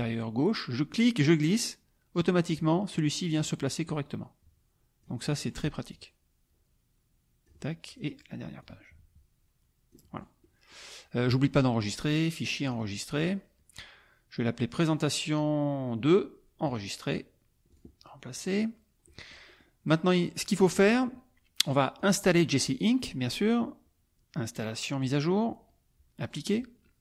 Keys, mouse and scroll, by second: 1.0-2.7 drag, 2.9 click, 3.8-5.2 drag, 5.4 click, 5.9-7.6 drag, 7.9 click, 8.6-10.1 drag, 10.1 click, 10.4 middle click, 11.8 click, 12.8 click, 15.0 click, 16.6 click, 17.7 click, 18.3 click, 19.1 click, 19.2 middle click, 19.3 click, 19.9 click, 22.0 click, 25.0 click, 26.2 click.